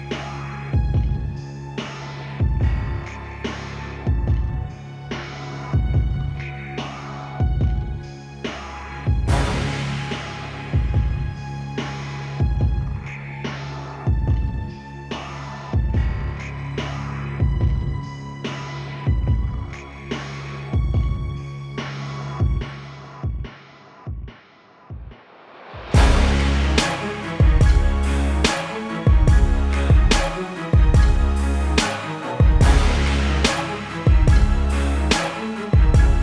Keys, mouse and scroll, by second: 1.3 alt+click, 2.6 click, 5.3 alt+BackSpace, 6.6 click, 7.3 ctrl+t, 8.4 alt+shift+click, 11.5 alt+shift+click, 13.8 KP_Enter, 14.7 v, 15.5 shift+click, 16.3 right click, 17.5 click, 24.3 click, 25.6 KP_Enter, 26.5 right click, 28.5 click, 31.9 ctrl+t, 32.9 click.